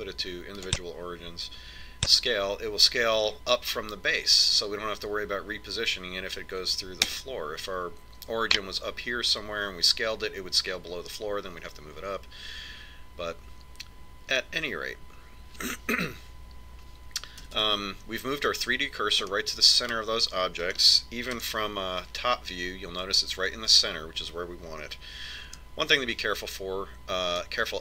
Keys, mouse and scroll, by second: 0.6 click, 3.5 s, 18.9 a, 19.0 a, 20.7-22.7 middle drag, 23.0 KP_7, 27.0 KP_1.